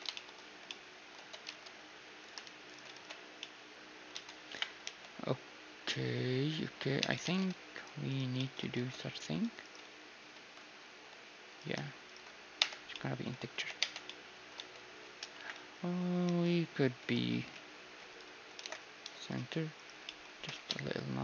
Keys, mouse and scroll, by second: 0.5 z, 1.2 Tab, 2.7-4.7 right drag, 3.0 ctrl+x, 3.4-5.2 middle drag, 4.1 Tab, 4.5-6.6 typing, 7.0 Tab, 8.4-10.1 right drag, 9.3 ctrl+Tab, 10.1 click, 10.1 middle click, 10.2 ctrl+x, 10.2 ctrl+z, 10.2-11.6 right drag, 11.0 x, 12.1-14.1 right drag, 12.6 f, 12.9 click, 12.9-16.0 middle drag, 13.6 t, 13.9 Tab, 15.4 Tab, 15.4-17.4 typing, 18.6 alt+m, 19.8-21.2 right drag, 20.1-21.2 middle drag, 20.4 g.